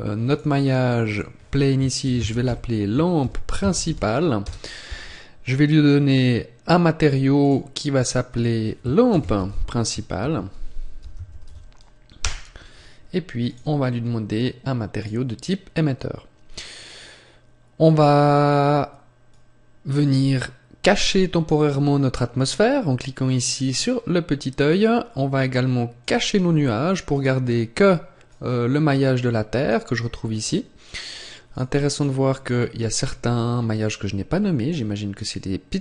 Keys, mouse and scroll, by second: 5.9 click, 13.3 click, 16.5-18.0 scroll up 1, 19.1 click, 22.3 click, 25.9 click, 27.0 right click, 28.1 click, 30.2-31.3 scroll down 1, 31.3 click, 31.3-31.8 scroll down 1, 32.2-33.0 scroll up 2, 33.4-33.8 scroll down 1, 33.8 scroll down 1.